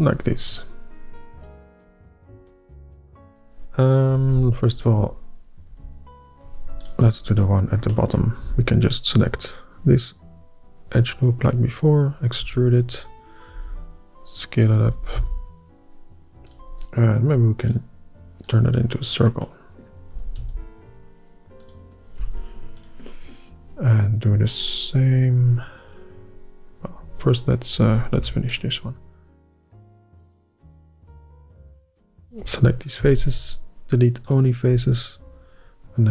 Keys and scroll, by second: 2.4 ctrl+z, 2.7 ctrl+z, 3.0 ctrl+z, 5.1 ", 5.8 é, 12.5 e, 13.6 s, 15.0 s, 15.3 y, 20.2 s, 22.3 s, 28.3 ctrl+r, 31.9 ", 33.1 x.